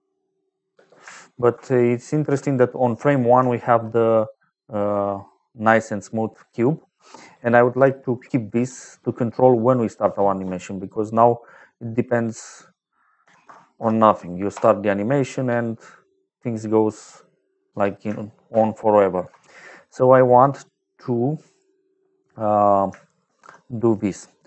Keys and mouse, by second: 0.6 space, 1.4 shift+click, 3.4 shift+middle click, 3.9 middle click, 9.5 middle click, 12.3 click, 13.1 KP_5, 13.4 KP_0, 13.7 KP_0, 14.4 Return, 15.2 space, 17.1 middle click, 17.6 space, 18.4 shift+click, 20.5 click, 21.2 middle click, 23.2 shift+a.